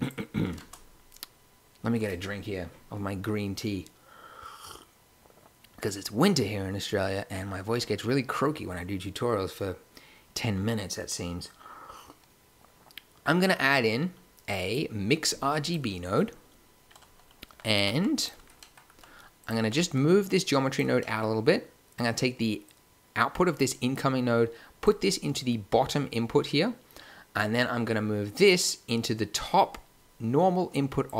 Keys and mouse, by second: 0.5 shift+a, 17.7 g, 19.5 g, 24.4 click, 27.3-29.1 drag.